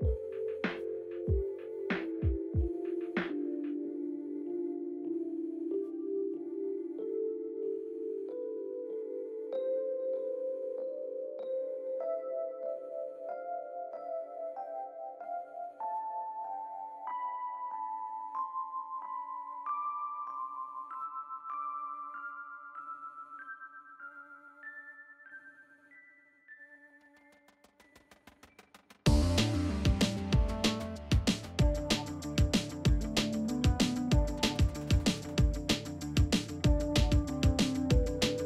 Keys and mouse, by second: 0.5 shift+click, 0.8 middle click, 1.6 shift+click, 2.1 shift+click, 2.5 middle click, 3.0 shift+click, 3.6 shift+click, 4.0 middle click, 4.4 middle click, 7.2 Tab, 7.3-8.4 middle drag, 8.5 Tab, 8.7 middle click, 9.6 middle click, 10.0 KP_3, 10.6 alt+z, 10.8 click, 11.2 alt+z, 11.5 middle click, 13.2 alt+z, 13.5 alt+z, 13.7 Tab, 14.0-14.6 middle drag, 14.9 shift+middle drag, 15.4 middle click, 16.1 Tab, 16.8 alt+z, 17.1 middle click, 17.5 click, 17.7 alt+z, 17.8 middle click, 18.2 g, 19.8 ctrl+shift+b, 20.7 alt+z, 20.7 middle click, 21.2 ctrl+z, 22.1 ctrl+shift+b, 24.2 alt+z, 24.4 middle click, 25.3 alt+z, 29.4 middle click, 29.9 alt+z, 30.4 KP_3, 30.8 alt+z, 31.1 shift+middle click, 34.3 r, 35.0 r, 37.9 g.